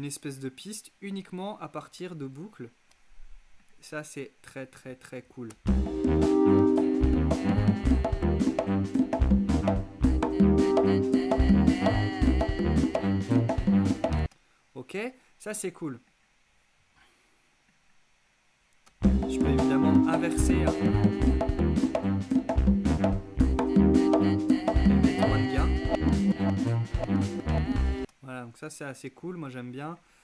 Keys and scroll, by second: 5.6 space, 14.2 space, 18.9 space, 28.0 space.